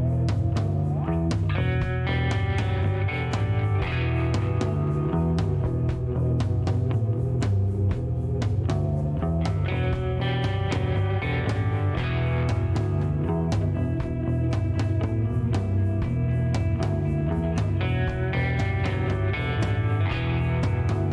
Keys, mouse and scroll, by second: 2.0 click, 4.5 click, 6.2-7.1 typing, 7.8 click, 9.1 middle click, 9.4 scroll down 1, 10.2 shift+right click, 10.7 shift+scroll down 1, 10.9 shift+middle click, 13.0-13.5 scroll up 6, 14.0 middle click, 14.5 shift+right click, 14.9 shift+scroll down 2, 15.2 middle click, 15.5 scroll down 2, 16.6-17.0 scroll up 4, 18.5 click, 18.8 scroll down 2, 19.8 shift+right click, 20.7 shift+middle click.